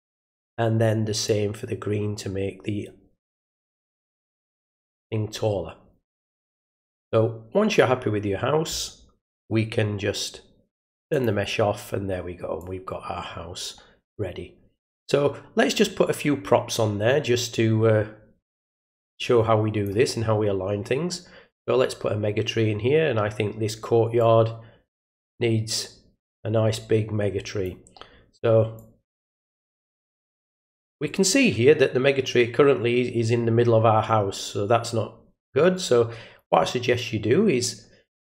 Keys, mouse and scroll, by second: 1.2-7.7 drag, 11.1 click, 12.6-19.8 drag, 21.5 click, 24.2-27.6 drag, 28.7-38.2 drag.